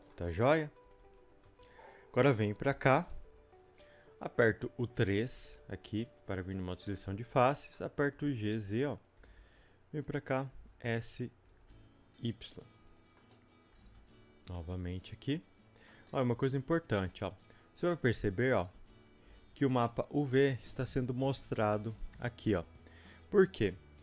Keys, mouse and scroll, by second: 0.1-2.3 middle drag, 0.7 scroll up 2, 0.8 g, 2.3 click, 3.3 Return, 5.0 click, 5.4 3, 6.5 click, 7.7-15.7 middle drag, 8.2 g, 13.7 e, 15.7 click, 15.9 middle click, 16.8 shift+click, 17.4 click, 17.9 middle click, 18.6 shift+click, 19.3 s, 21.9 a.